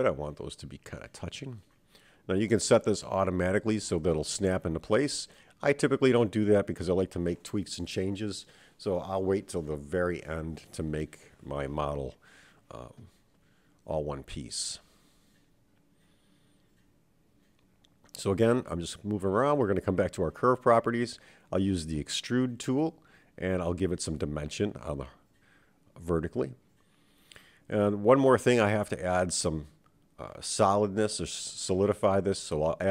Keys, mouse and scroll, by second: 1.2-2.7 scroll up 3, 2.7 g, 6.0-7.0 scroll down 4, 7.0 middle click, 8.3 Tab, 8.7-9.6 scroll down 4, 9.6-10.6 middle drag, 11.0 KP_7, 14.9 Tab, 15.4-16.7 middle drag, 17.2 Tab, 19.1 click, 20.5-23.4 drag, 31.6 click, 32.3-32.9 drag.